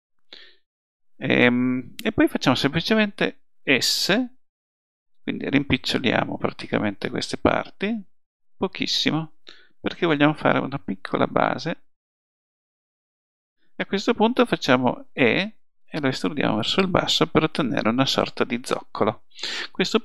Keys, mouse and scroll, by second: 15.2 e.